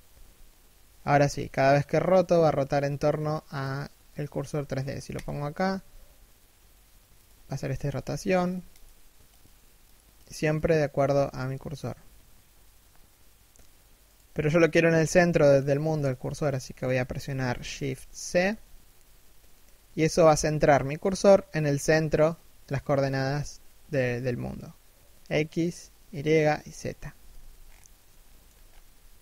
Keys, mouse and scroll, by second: 4.7 click, 5.1 r, 7.0-7.3 scroll down 1, 7.3 r, 8.3 click, 10.6 r, 14.6 middle click, 15.2 KP_1, 15.9 shift+middle click, 17.5 shift+c, 21.8 middle click, 22.5 z, 23.5-24.2 scroll down 1, 26.6 1, 26.9 z, 27.1-27.7 scroll up 1, 27.7 shift+middle click, 28.2 scroll down 1, 28.5 r.